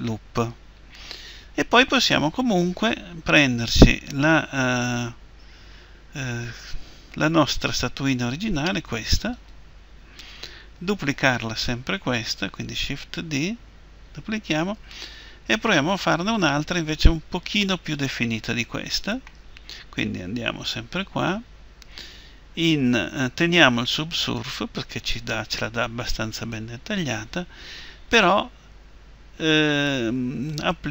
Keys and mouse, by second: 8.9 Tab, 9.4-11.9 right drag, 13.0 shift+d, 16.4-20.1 drag, 20.1 Tab, 20.9 Tab.